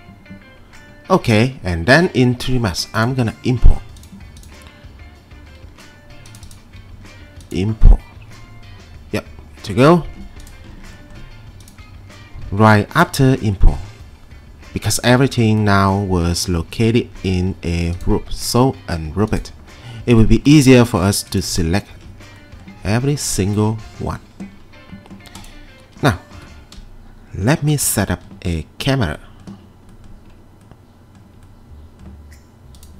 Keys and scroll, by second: 12.2 F3, 26.3 p, 27.4 F3.